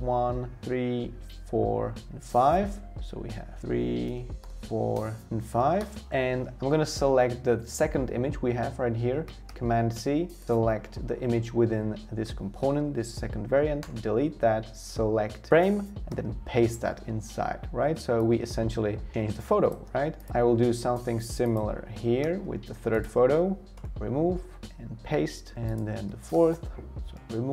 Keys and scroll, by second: 3.6 3, 4.4 4, 5.6 5, 5.8 Return, 9.5 super+c, 13.8 BackSpace, 16.1 super+v, 22.2 super+c, 23.7 BackSpace, 24.6 super+v, 26.3 super+c, 27.1 BackSpace.